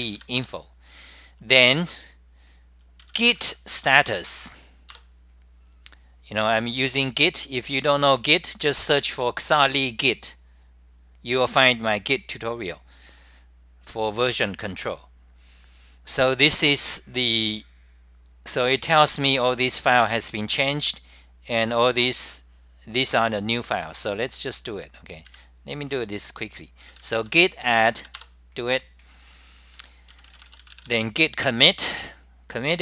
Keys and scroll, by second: 0.3 Return, 0.7-1.4 typing, 4.1 super+r, 4.1 Return, 5.1 Return, 6.8-10.1 typing, 7.8-8.5 scroll up 7, 12.5-13.8 typing, 12.7-14.0 scroll up 15, 15.3-16.1 typing, 15.6 scroll up 10, 17.9-20.3 scroll up 24, 20.1-20.8 typing, 22.5-23.3 typing, 22.8 scroll up 10, 24.4 super+r, 24.4 scroll up 10, 25.3 super+=, 27.2-28.0 typing, 28.3 Return, 30.1-32.8 typing, 30.4 scroll up 10, 31.0 Up, 31.6 Return, 32.0 scroll up 10.